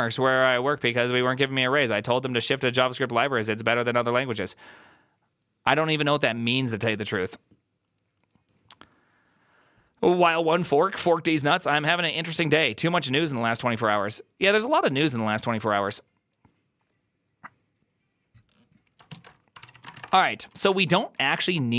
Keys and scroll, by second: 19.5 alt+{, 19.5 ctrl+c, 19.5-21.0 typing.